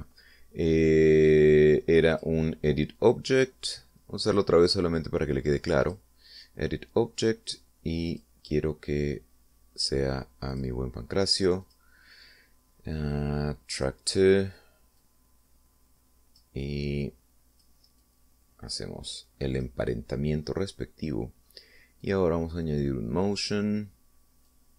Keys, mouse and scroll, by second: 0.7 right click, 3.4 click, 7.1 click, 9.3 click, 11.8 click, 12.9 click, 15.0 click, 16.2-17.8 drag, 18.3 click, 19.3-21.1 drag, 21.9-22.9 middle drag, 23.3 click, 24.7 click.